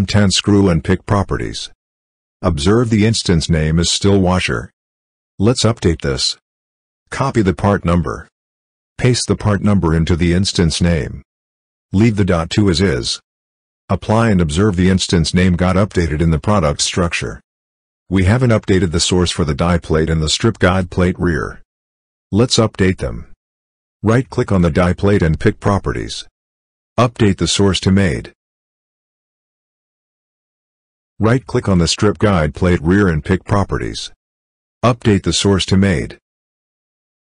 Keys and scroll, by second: 6.7 ctrl+v.